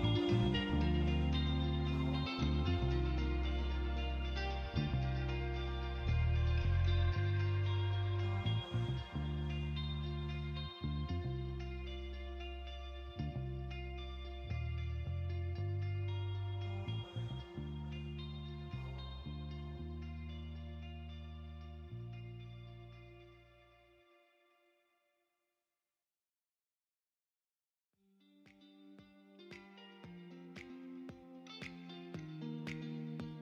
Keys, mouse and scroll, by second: 0.5 click, 6.0 click, 6.7-8.4 drag, 12.1 click, 12.9 click, 14.0 click, 16.2 click, 17.5 click, 18.7 KP_0, 20.2 KP_0, 22.8-25.1 shift+drag, 26.5-28.1 shift+drag, 28.2 middle click, 29.7-32.5 middle drag.